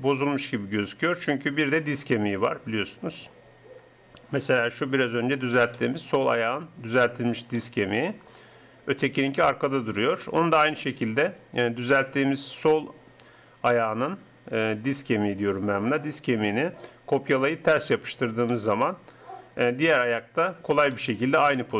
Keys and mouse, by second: 4.5-6.4 drag, 9.1-10.6 drag, 19.9 KP_3.